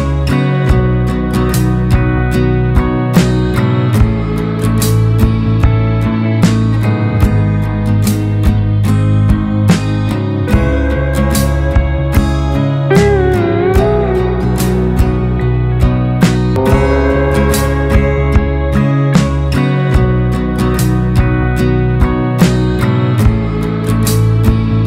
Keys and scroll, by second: 2.7 Delete, 3.5 ctrl+space, 5.4 Left, 5.7 Down, 6.0 Left, 6.8 ctrl+space, 9.8 ctrl+alt+space, 10.3 typing, 14.0 Up, 14.1 Up.